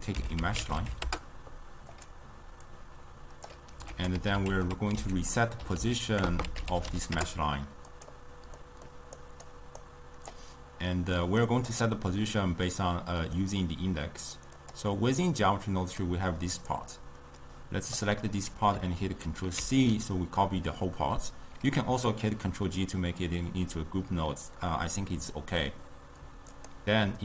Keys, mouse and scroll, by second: 2.8-4.0 drag, 4.0 ctrl+a, 6.4 BackSpace, 8.7-9.3 middle drag, 9.3 click, 9.9 click, 11.0-11.5 middle drag, 11.5 click, 12.7-14.6 middle drag, 14.6 click, 15.5-16.8 middle drag, 16.8-19.6 drag, 19.6 ctrl+c, 26.6 click.